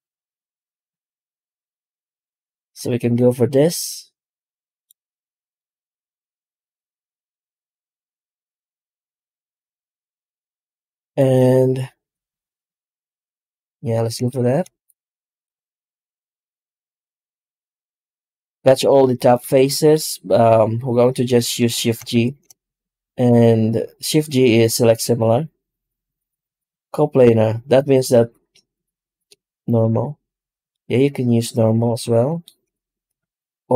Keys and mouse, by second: 15.3 right click, 16.0 Tab, 16.8 3, 17.3-19.1 right drag, 21.2 middle click, 22.0 shift+g, 30.6-32.5 middle drag, 33.1 ctrl+z.